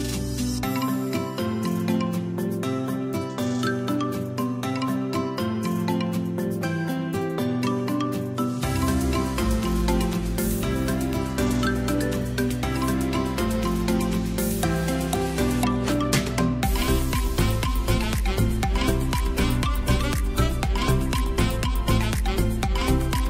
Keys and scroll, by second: 15.4 space, 22.9 v.